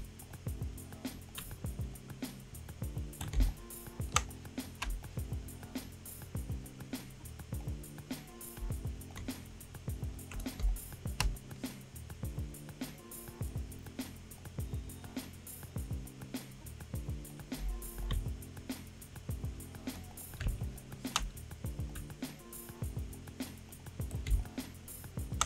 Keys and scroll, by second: 3.3 space, 10.6 space, 11.2 space, 20.4 space, 24.3 space.